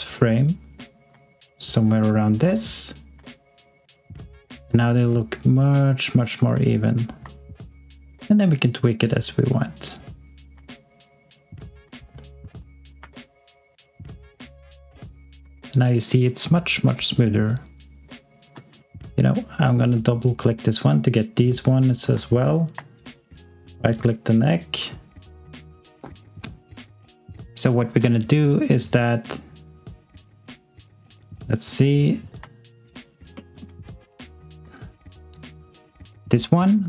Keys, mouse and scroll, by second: 1.2 alt+click, 8.1 click, 10.7 alt+click, 12.0-12.3 scroll down 1, 12.4 x, 12.9 s, 18.5 x, 18.9 alt+click, 19.1 click, 22.2 alt+click, 23.4 click, 28.8 click, 32.6 alt+click, 33.3 alt+middle click, 33.8 alt+click.